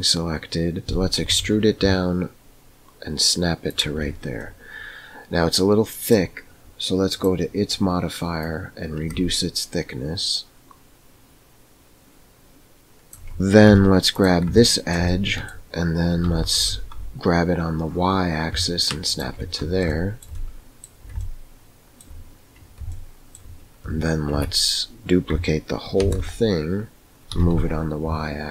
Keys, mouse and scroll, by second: 0.8 e, 4.4-6.1 middle drag, 7.0 click, 8.5-13.1 drag, 13.3 Tab, 13.8 2, 14.6 shift+middle click, 15.1 middle click, 16.2 g, 19.8 shift+middle click, 21.2 shift+middle click, 22.9 shift+middle click, 24.3 Tab, 26.1 shift+d.